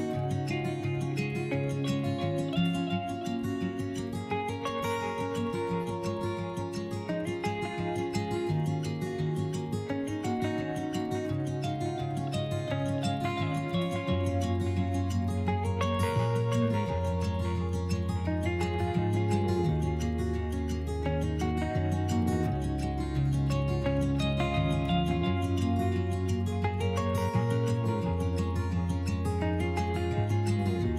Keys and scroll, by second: 1.0 s, 7.5 1, 16.6 s, 23.1 s, 30.7 s.